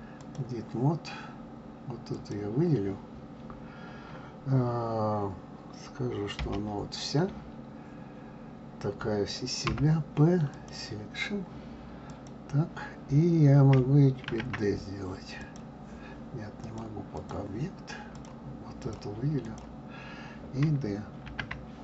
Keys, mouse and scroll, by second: 2.1 click, 12.0 click, 14.3 shift+d, 16.6-18.2 drag, 18.8 drag, 19.4 click, 21.2 shift+d.